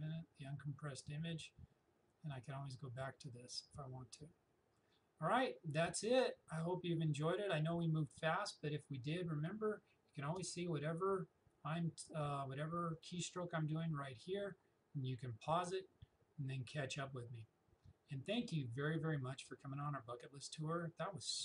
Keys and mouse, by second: 10.2 space.